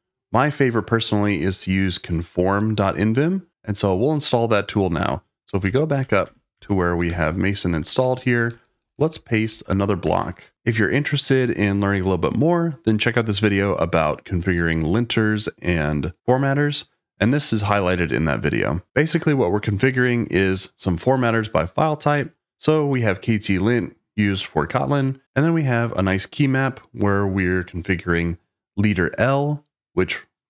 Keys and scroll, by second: 5.5-10.0 typing.